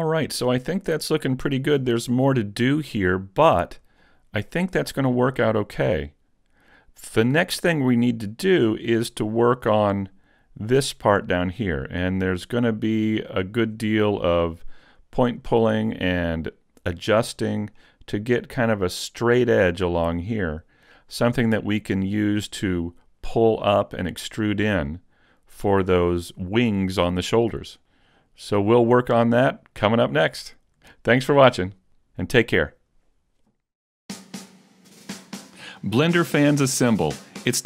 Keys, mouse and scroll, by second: 1.1 middle click, 3.1 middle click, 4.1 shift+middle click, 8.5-9.3 scroll down 6, 9.3 shift+middle click, 10.1 right click, 11.9 middle click, 13.5 scroll down 2, 14.1 middle click, 15.9 middle click, 21.5 middle click, 24.9 middle click.